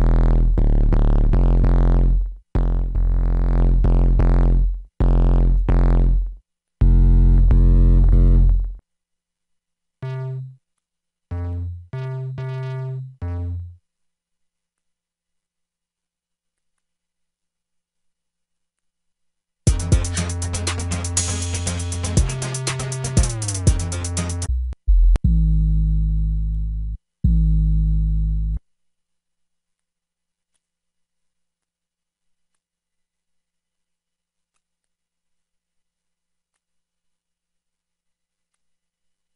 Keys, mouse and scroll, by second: 1.0 shift+Return, 16.0 F1.